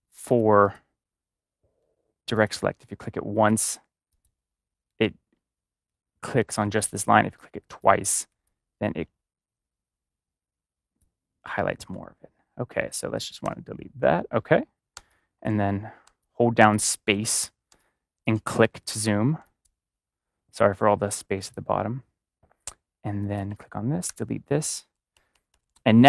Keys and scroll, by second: 11.8 ctrl+z, 13.3 ctrl+z, 14.3-18.3 typing, 19.3 space, 24.0 space, 25.1 ctrl+-.